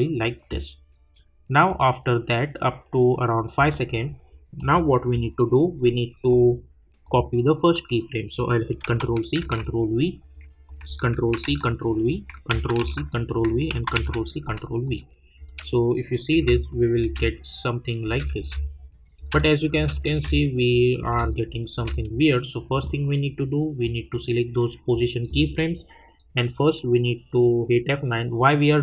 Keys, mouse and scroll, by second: 1.6-4.5 drag, 7.0 click, 10.2 click, 12.1 click, 13.2 click, 14.8 click, 15.4 space, 16.7 click, 17.0 space, 20.7 click, 21.0 space, 22.7-27.2 drag.